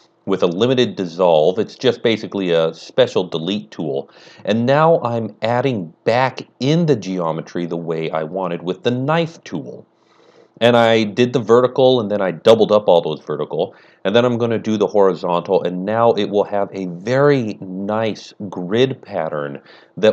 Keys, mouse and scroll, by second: 0.4 click, 0.5 ctrl+space, 0.6 ctrl+z, 0.8 ctrl+middle click, 0.8 ctrl+scroll down 1, 1.4 click, 1.4-6.8 typing, 1.6 click, 2.3 click, 2.8 click, 3.1 click, 4.0 click, 4.3 click, 4.7 click, 5.3 click, 5.9 click, 6.3 click, 6.8 scroll up 1, 6.9 click, 9.6 click, 11.2-11.6 click, 15.7 space, 16.0 shift+middle click, 16.0 k, 16.1 click, 16.8 space, 16.9 k, 17.3 click, 18.1 click, 19.4 click.